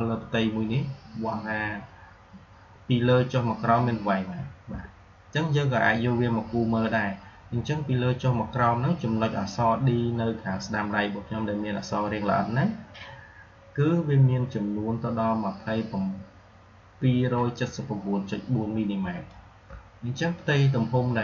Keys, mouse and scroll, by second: 3.5-19.2 drag, 11.8-13.0 drag.